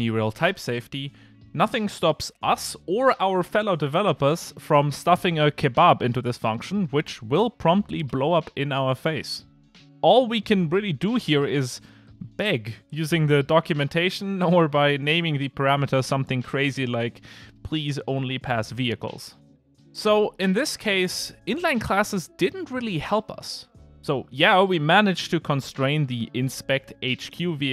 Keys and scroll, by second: 2.1 Return, 4.1 Return, 5.6 ctrl+r, 6.8 ctrl+r, 12.0 alt+shift+Left, 17.5 alt+Return.